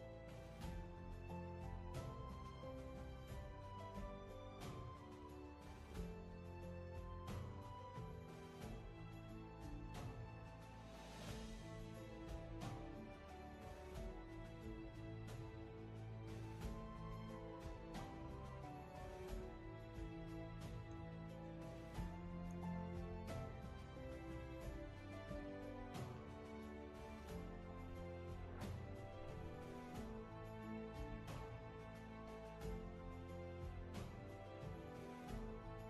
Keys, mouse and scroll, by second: 9.5-10.0 scroll up 1, 16.7-18.5 scroll down 1, 19.1-20.7 scroll up 1.